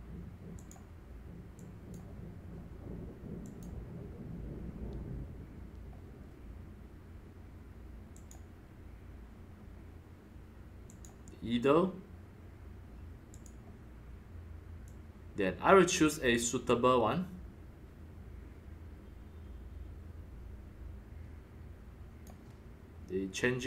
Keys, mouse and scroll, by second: 0.5 click, 0.7-1.4 drag, 1.5 click, 3.4 click, 5.6 drag, 8.1-10.5 drag, 10.9 click, 11.2 click, 13.3 click, 14.8-18.5 drag, 18.8-22.1 drag, 22.1-23.6 drag.